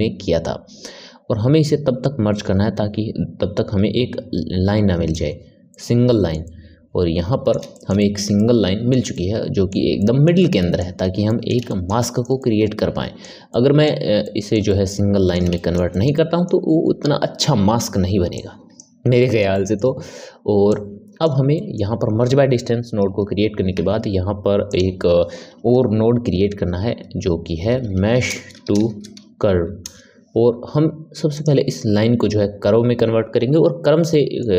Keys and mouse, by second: 5.6-18.2 middle drag, 18.2 click, 19.1-20.6 ctrl+middle drag, 20.6 click, 21.5-23.7 middle drag, 23.7 shift+a, 34.0-34.5 middle drag.